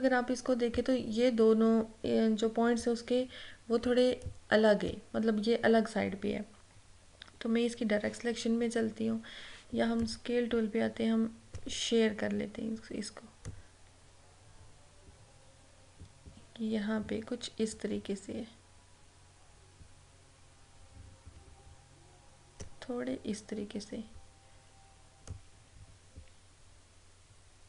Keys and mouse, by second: 4.4 click, 10.1-13.6 drag, 13.6-23.6 drag, 25.3-27.6 drag.